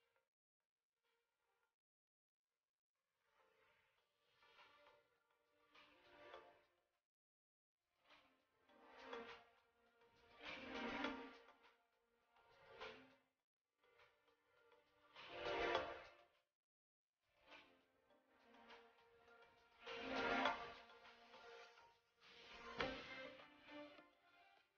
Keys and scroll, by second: 3.1 shift+space, 6.3 shift+space, 6.8 ctrl+z, 7.2 shift+space, 18.3 shift+space, 20.0 shift+space, 22.2 shift+space, 23.3 space.